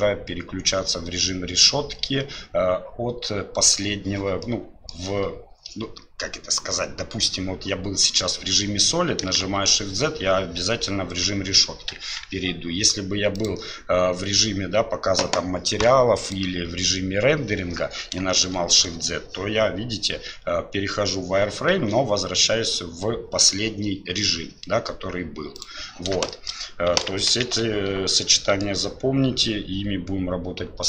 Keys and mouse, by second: 4.5 click, 9.4 shift+z, 12.1 Tab, 15.6 click, 16.6 click, 18.4 shift+z, 21.7 shift+z, 26.3 shift+middle drag, 26.9 shift+z, 28.1 click.